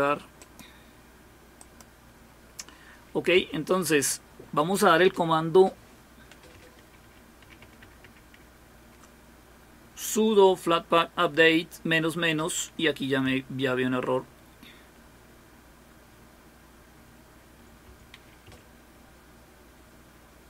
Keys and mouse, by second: 1.6 click, 7.0 ctrl++, 7.4 ctrl++, 7.6 ctrl++, 13.9 Left, 13.9-17.6 Left, 17.8 Left, 18.5 Delete.